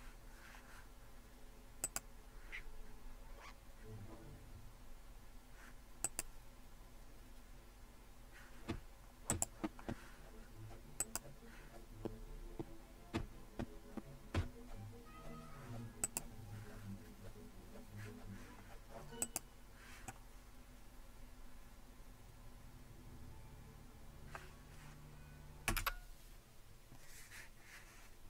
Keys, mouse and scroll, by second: 1.8 click, 2.9 click, 3.4 click, 6.0-8.4 drag, 9.3-12.0 drag, 12.5 click, 16.1-17.2 drag, 19.2-20.5 drag, 25.7-26.0 typing.